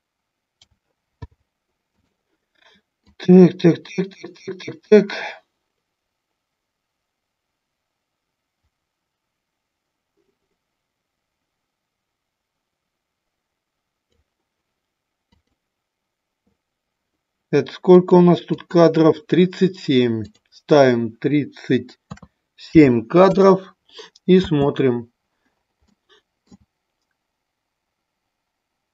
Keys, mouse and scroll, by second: 0.5 a, 1.2 i, 3.0-14.2 drag, 15.3-18.0 drag, 18.6 click, 20.2-23.5 drag, 24.4 space, 25.9 middle click.